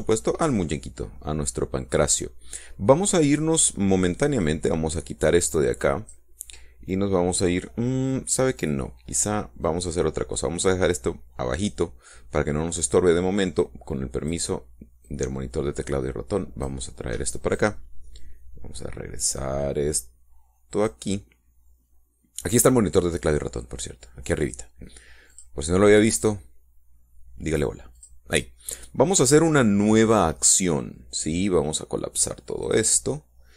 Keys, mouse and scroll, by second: 0.8-1.2 scroll up 1, 1.2-3.6 middle drag, 5.2-7.1 drag, 10.4-12.7 drag, 14.4 click, 15.8-17.6 drag, 18.3-21.8 drag, 26.1 click, 28.7 click, 33.4 click.